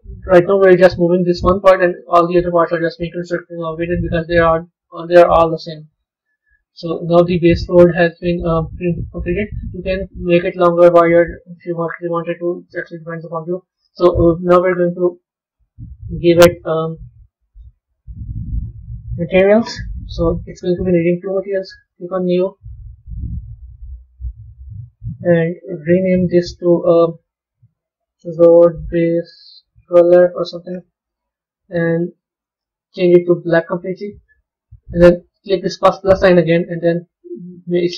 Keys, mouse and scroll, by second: 0.0-2.6 middle drag, 3.0-6.2 middle drag, 6.2 Tab, 6.8-9.8 middle drag, 14.9 click, 16.1 click, 17.4 click, 21.7-25.1 drag, 25.7 click, 25.9-29.0 drag, 32.3 click, 35.8-37.9 drag.